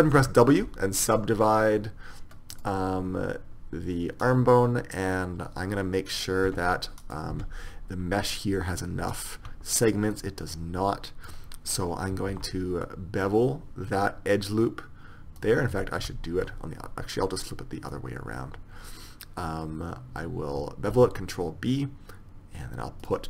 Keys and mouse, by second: 0.4 w, 4.3-6.2 right drag, 6.2-9.0 right drag, 6.6 Tab, 7.4 Tab, 9.2-10.2 right drag, 10.2-11.9 drag, 12.4 ctrl+b, 15.9 ctrl+z, 21.0 ctrl+b.